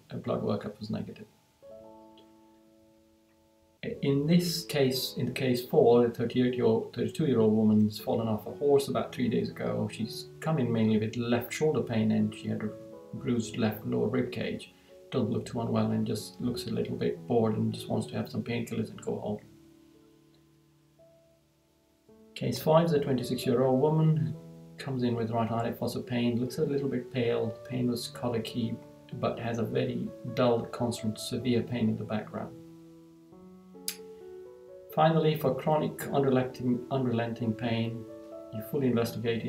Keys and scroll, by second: 1.0 Right, 19.5 Right, 32.4 Right, 37.8 Right.